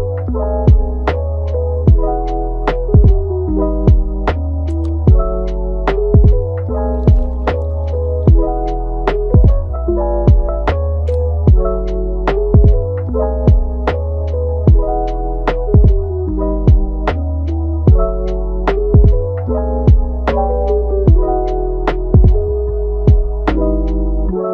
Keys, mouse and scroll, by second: 1.2 ctrl+t, 4.3-6.5 middle drag, 6.5 ctrl+z, 6.7 ctrl+z, 7.1 ctrl+z, 7.4 ctrl+z, 10.8-11.6 middle drag, 11.6-12.4 scroll up 4, 12.4-12.8 scroll up 2, 12.8 Tab, 13.2-14.0 middle drag, 14.0 scroll down 4, 14.2-15.1 middle drag, 15.1 scroll up 4, 15.8 scroll down 4, 16.6 click, 17.0 Tab, 17.4 click, 18.3 alt+s, 19.6 g, 20.8-21.7 middle drag, 21.7-22.4 scroll down 2, 22.4 click, 22.6 g, 23.5-23.9 middle drag, 23.9 scroll up 1, 24.2-24.5 middle drag.